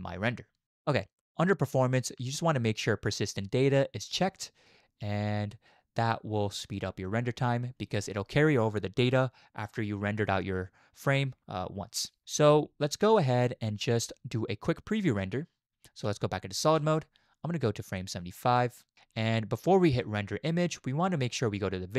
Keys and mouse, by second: 1.7 click, 6.0 click, 16.0 z, 17.9-18.9 drag, 20.1 click.